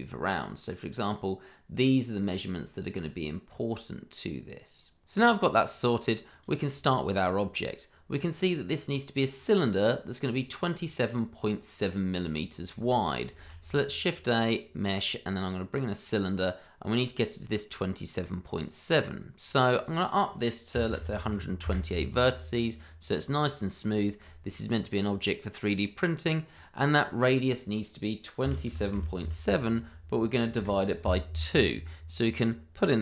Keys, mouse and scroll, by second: 0.5 click, 12.1 middle click, 13.4 shift+a, 14.8 click, 18.5 click, 20.7 1, 20.8 2, 21.0 8, 21.6 Return, 23.4-23.8 scroll up 1, 23.9 shift+middle click, 24.5-26.5 scroll down 1, 26.5 click, 28.4 KP_2, 28.6 KP_7, 28.9 KP_Decimal, 29.2 KP_7, 30.5 KP_Divide, 31.0 KP_2.